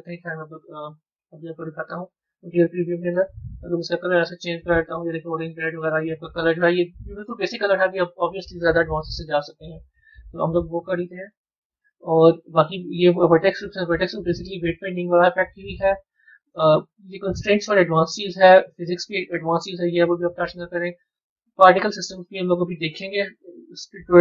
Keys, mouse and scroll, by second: 1.2 z, 1.4 z, 3.6 click, 9.7 z, 10.6 z, 12.5 click, 16.4 click, 18.1 click.